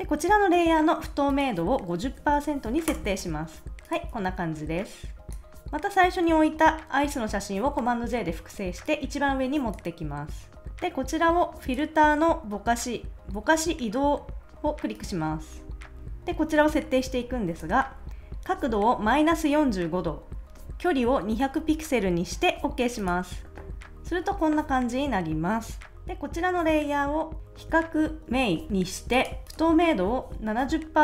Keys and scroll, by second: 1.9-2.8 typing, 2.9 Return, 4.1 super+s, 7.8 super+j.